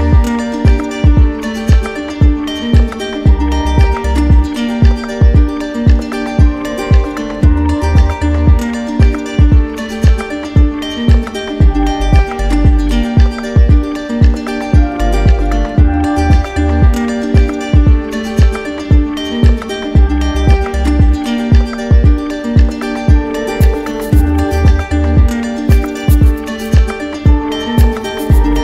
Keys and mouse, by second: 5.4-6.4 drag, 9.1-10.2 drag, 11.0 click, 12.5 alt+click, 13.4 alt+click, 14.1 click, 14.7 alt+click, 15.2 alt+click, 17.6 w, 19.6 alt+click, 20.4 alt+click, 24.8 click, 27.2 click, 28.0 alt+click.